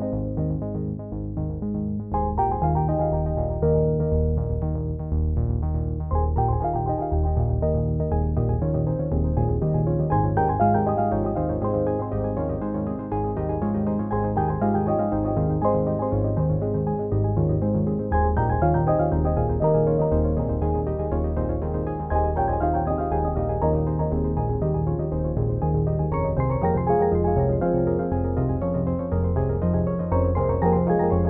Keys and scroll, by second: 17.4 ctrl+n.